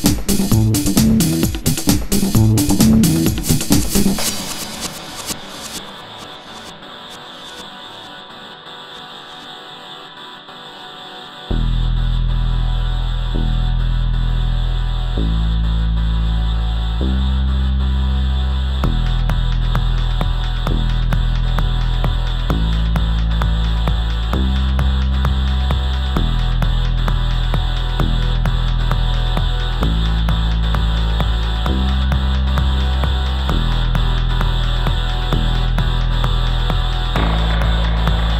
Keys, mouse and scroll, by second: 0.6 Tab, 3.3 x, 5.6 Tab, 13.1 i, 14.9 right click, 18.7 shift+Left, 22.4 g, 25.4 right click, 26.0 g, 29.1 i, 30.3-32.2 right drag, 37.5 alt+a.